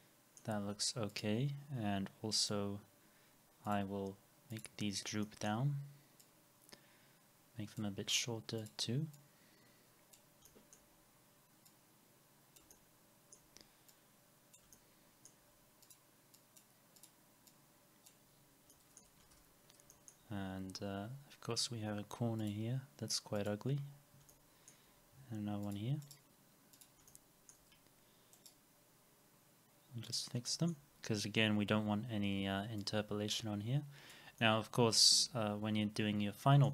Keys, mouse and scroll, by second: 5.2 middle click, 12.7 alt+middle click, 14.7 alt+middle click, 17.5 double click, 18.3-18.6 scroll up 1, 19.2 alt+x, 24.3 alt+middle click, 26.0 right click, 27.1 alt+middle click, 27.7 scroll up 1, 28.4 right click, 34.4 alt+middle click.